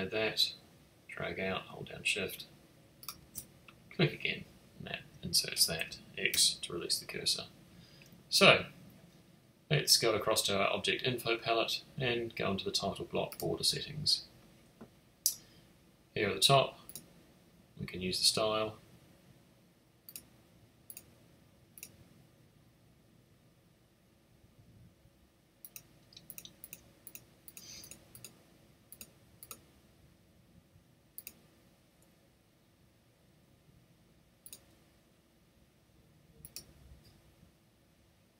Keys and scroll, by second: 6.3 x.